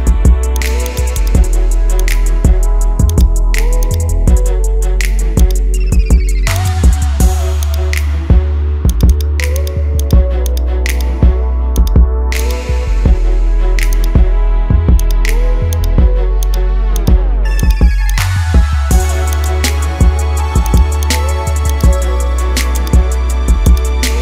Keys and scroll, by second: 8.4 ctrl+z.